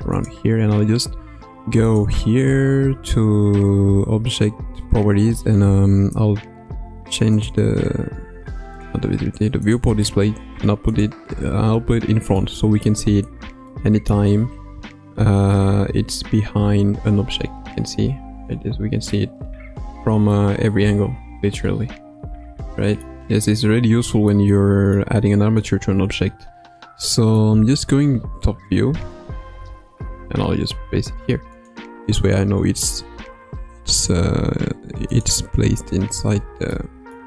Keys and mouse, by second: 1.8 click, 7.3 click, 8.7 click, 9.6 click, 10.9 click, 12.4-12.9 middle drag, 13.7-14.1 middle drag, 15.5-19.1 middle drag, 20.3-23.0 middle drag, 24.2 shift+middle click, 24.5-25.1 middle drag, 25.6 click, 26.1-27.3 middle drag, 28.0 KP_7, 29.4 g, 33.2 g, 36.8-37.1 middle drag.